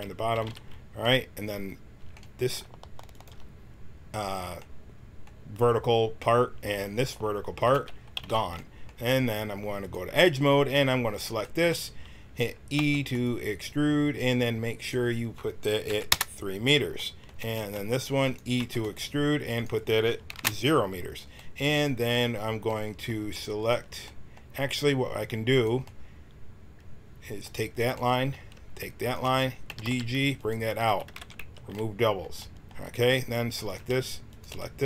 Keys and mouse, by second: 0.3 x, 3.1-4.7 drag, 4.7 middle click, 7.5-9.4 drag, 8.1 x, 9.8-13.1 right drag, 12.7 e, 14.7-16.9 drag, 18.2-21.0 drag, 18.2-21.3 right drag, 18.5 e, 23.5-25.4 right drag, 25.4-27.3 middle drag, 25.8-27.1 drag, 29.0 middle click, 29.6-31.3 typing, 33.6-34.8 right drag.